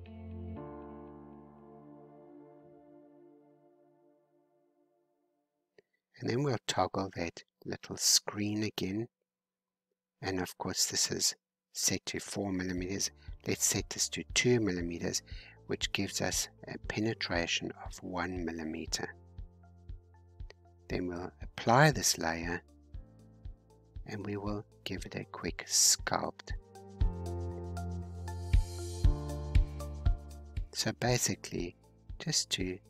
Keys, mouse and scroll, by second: 4.2 scroll down 2, 4.5 scroll up 1, 4.9-6.3 drag, 6.3-7.2 scroll down 4, 7.2 scroll down 1, 7.3-9.7 shift+middle drag, 9.7 click, 11.8-13.8 drag, 13.8 scroll down 3, 14.6-19.2 middle drag, 19.2 scroll up 2, 20.6-22.8 drag, 22.8-23.4 scroll down 1, 23.9 scroll down 1, 24.1-26.4 middle drag, 26.4 click, 27.2-28.3 middle drag, 28.3-29.4 drag, 29.4-31.0 middle drag, 31.0-32.8 drag.